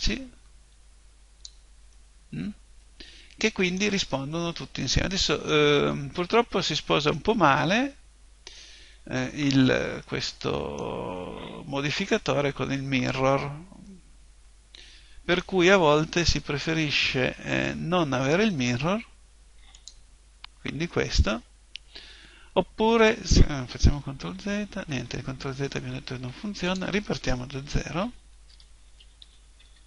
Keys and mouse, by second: 1.9-19.7 middle drag, 19.7 click, 24.1 ctrl+z, 24.9 ctrl+z, 26.7 click, 27.6 ctrl+n, 28.5 Tab, 29.2 ctrl+n.